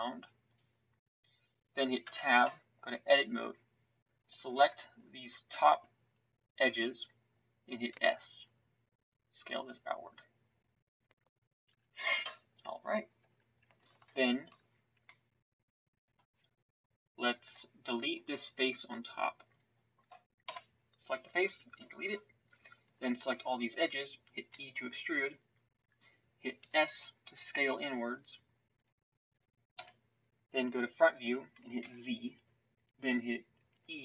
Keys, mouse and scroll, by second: 2.0 Tab, 11.7 Tab, 13.2 Tab, 20.4 Delete, 24.5 e, 26.6 s, 29.7 KP_1, 31.8 z.